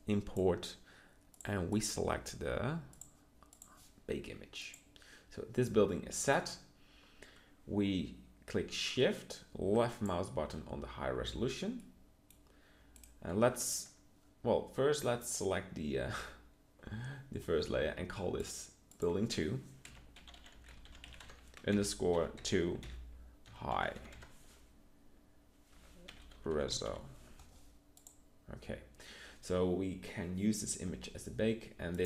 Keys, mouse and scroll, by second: 11.4 z.